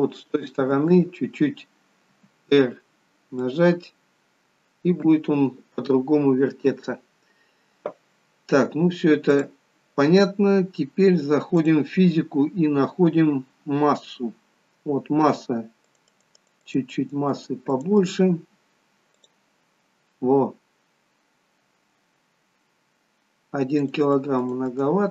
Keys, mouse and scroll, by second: 3.5 r, 9.4 click, 11.6 click, 14.2-14.6 scroll down 1, 15.8 click, 16.1 click, 17.0-18.0 click, 23.9 click, 24.1 click, 24.7 click.